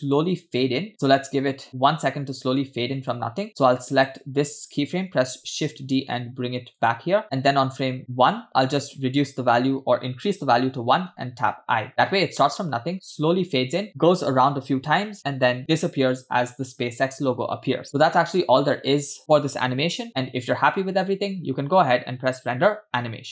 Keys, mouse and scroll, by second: 0.9-3.4 drag, 4.0 click, 5.4 shift+d, 7.9 click, 9.2-10.7 drag, 11.5 i, 12.7 space, 15.8 space, 18.1-20.0 scroll down 2, 20.1-20.6 scroll up 3, 22.3-23.3 drag.